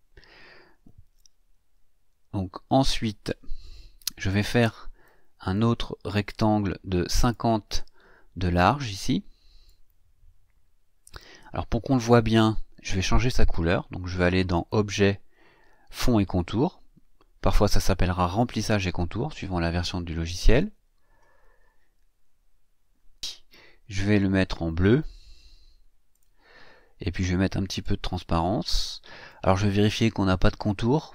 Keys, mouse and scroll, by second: 1.2 shift+scroll down 2, 2.4-3.0 ctrl+scroll down 4, 4.2 click, 5.0-5.7 drag, 7.1 click, 9.6-11.4 drag, 14.5 click, 20.4 click, 26.1 click, 27.8-29.5 drag.